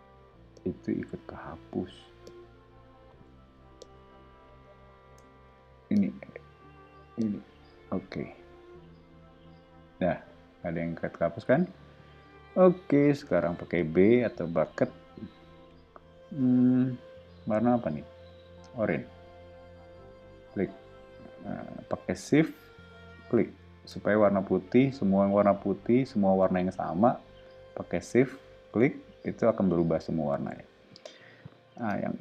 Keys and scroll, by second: 3.4 o, 5.4 e, 8.9 o, 13.6 b, 30.4 o, 31.7 space.